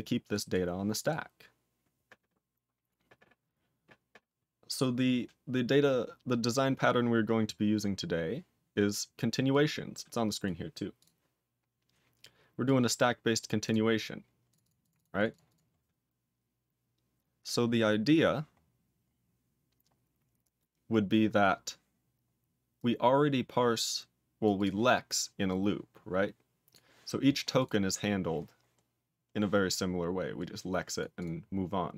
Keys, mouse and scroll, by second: 0.3 click, 0.5 click, 0.9 click, 7.9-9.5 scroll up 1, 9.5 click, 10.4 click, 10.9 click, 12.6 click, 13.4 click, 13.6 click, 14.4 click, 14.6 double click, 14.6 double click, 14.8 click, 14.9 double click, 15.1 click, 15.2 double click, 15.5 click, 18.6-21.3 scroll up 16, 22.7 click, 24.4 click, 24.5 click, 25.4 click, 26.7 click, 27.5 click, 27.6 click, 27.8-28.5 scroll down 6, 28.8 scroll down 3, 29.1-29.8 scroll up 14, 29.8-30.3 scroll up 1, 30.3 click, 31.0 click, 31.1 click, 31.4-31.9 scroll down 6.